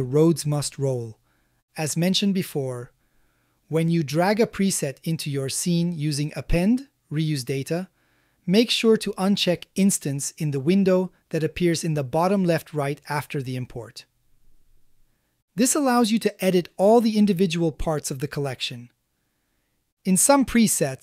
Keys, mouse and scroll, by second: 0.5 z, 2.5-3.9 middle drag, 4.2-5.7 middle drag, 6.2-7.7 shift+middle drag, 8.1-9.3 ctrl+middle drag, 15.3-15.9 scroll up 1, 15.9 middle click, 17.0 click, 17.5-17.9 middle drag, 18.3-18.7 shift+middle drag, 20.9 click.